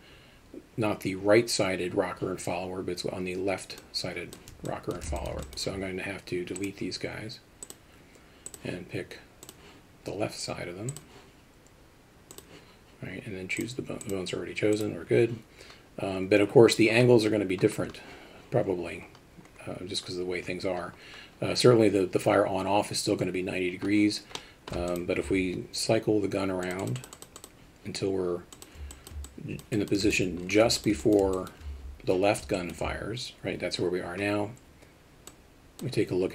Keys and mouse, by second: 4.7 alt+shift+middle click, 5.2 alt+shift+middle drag, 5.5 alt+middle click, 7.7 click, 8.5 click, 10.9 click, 13.8-14.9 drag, 24.4 middle click, 24.9 alt+shift+middle click, 26.8 click, 27.0 click, 27.1 click, 27.4 click, 28.6 click, 28.9 alt+middle drag, 29.3-29.6 alt+shift+middle drag, 29.8 alt+shift+middle click, 30.1 alt+shift+middle click, 30.8 alt+shift+middle click, 31.0 alt+middle drag, 31.4 alt+shift+middle drag, 32.6 alt+shift+middle drag, 35.3 click.